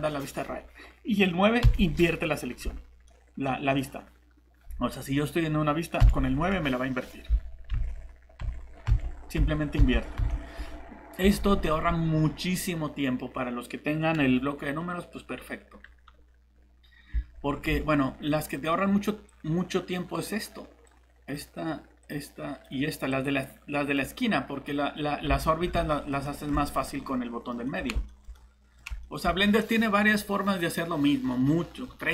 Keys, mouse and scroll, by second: 1.6 9, 3.1 middle click, 6.0 9, 7.7-10.2 typing, 11.2 alt+Tab, 17.1 alt+Tab, 17.7 alt+Tab, 19.3 click, 25.3 alt+Tab, 25.9 middle click, 26.2 typing.